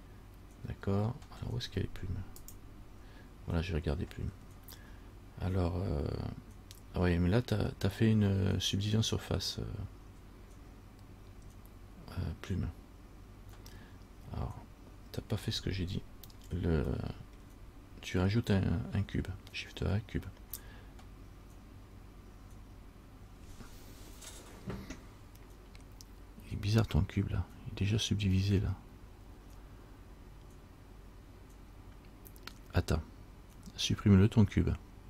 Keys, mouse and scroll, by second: 17.2 middle click, 17.2 scroll up 1.